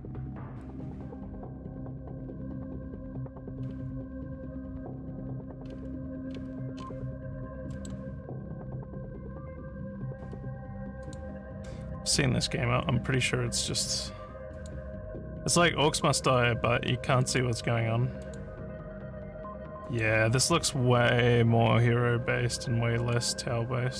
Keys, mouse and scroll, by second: 1.1 scroll down 1, 2.5 scroll, 3.6 scroll, 4.3 scroll, 5.6 scroll, 6.3 scroll down 1, 6.8 scroll up 4, 7.7 middle click, 11.0 click, 14.5 click, 15.9 click, 17.2 click, 18.2 click, 19.9 click, 20.5 click, 23.1 click.